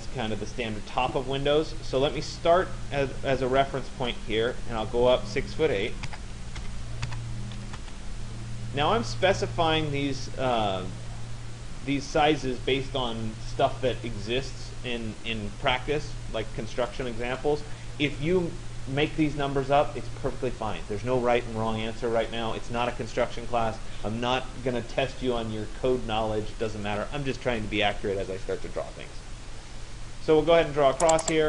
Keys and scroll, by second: 5.7 6, 7.8 Return.